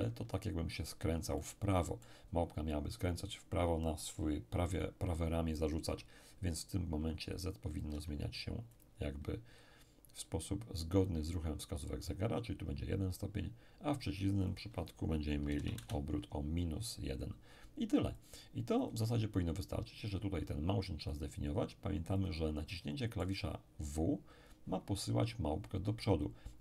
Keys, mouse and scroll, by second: 1.4-3.0 middle drag, 7.8-9.8 drag, 7.9 1, 14.4 click, 15.2-16.1 typing, 18.2-19.8 drag, 20.0 click, 22.2-24.2 drag, 22.7-24.2 middle drag, 26.1 click.